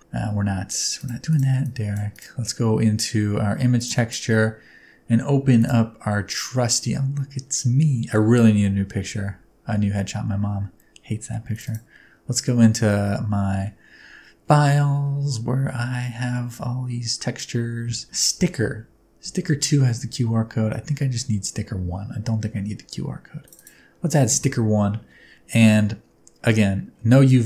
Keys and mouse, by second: 0.0 Tab, 1.6 click, 3.7 click.